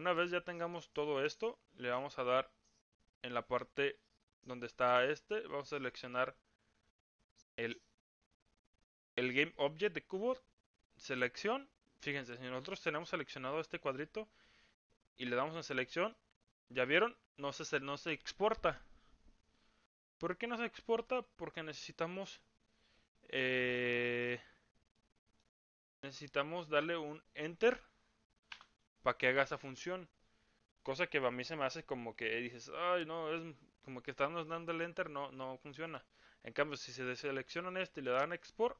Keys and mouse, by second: 9.3 click, 12.4 click, 16.1-33.1 drag, 35.7 click.